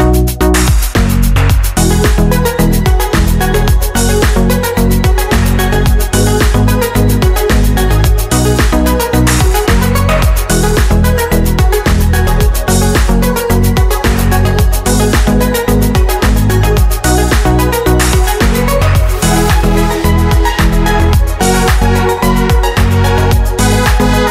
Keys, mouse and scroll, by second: 0.5 click, 1.1 click, 1.9 KP_Subtract, 2.9 click, 4.3 click, 5.2 click, 6.4 ctrl+c, 7.1 click, 7.8 ctrl+a, 8.2 ctrl+v, 8.6 ctrl+F1, 9.0-10.5 ctrl+drag, 10.7 click, 12.9 click, 13.7 KP_Subtract, 14.7 click, 15.6 click, 17.1 shift+click, 19.0 click, 20.0 click, 21.1 click.